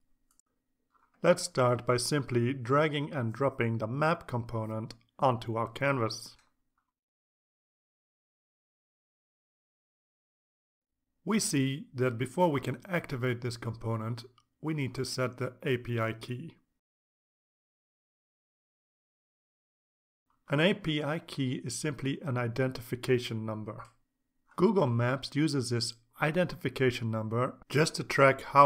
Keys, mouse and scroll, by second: 6.5 click, 6.7-7.9 typing, 9.2-10.2 drag, 16.7 click, 18.4 click, 19.5 click, 20.0-28.6 drag.